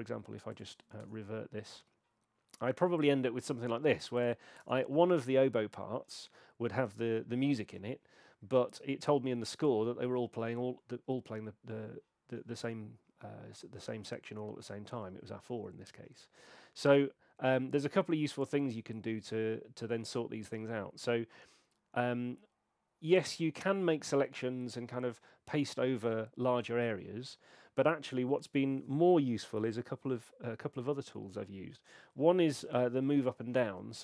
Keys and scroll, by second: 1.0 BackSpace, 4.6 BackSpace, 33.3 alt+n.